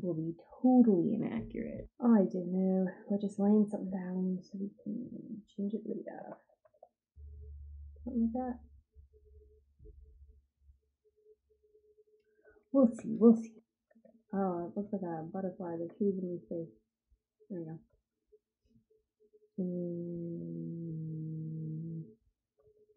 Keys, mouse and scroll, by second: 2.3 click, 4.9 click, 6.6 ctrl+z, 7.0 click, 15.0 ctrl+z, 15.6 ctrl+z, 16.5 click.